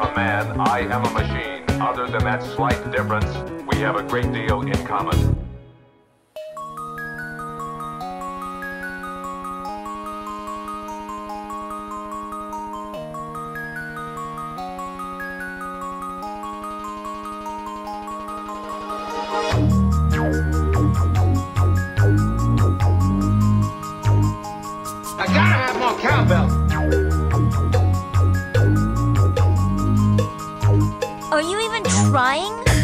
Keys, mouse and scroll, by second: 0.9-1.9 drag, 2.8 click, 4.4-5.3 drag, 6.4-11.3 drag, 8.1 Tab, 12.0 middle click, 13.2 shift+middle drag, 13.6-13.9 middle drag, 14.7 g, 15.7-17.6 drag, 21.4 click, 22.8 ctrl+z, 25.1-26.9 drag, 30.9-32.7 drag.